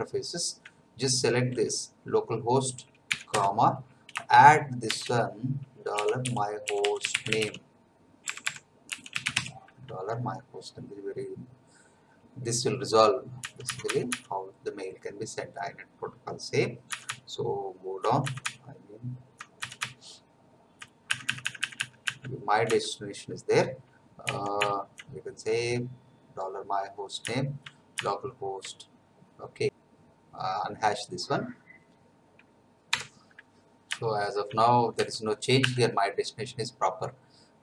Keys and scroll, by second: 3.3 space, 4.8-9.8 typing, 13.4 Down, 16.9 Down, 17.6 Down, 18.9 Down, 20.3 Down, 24.2 Left, 27.1 Right, 33.0 F9, 33.9 Right, 35.0 Down.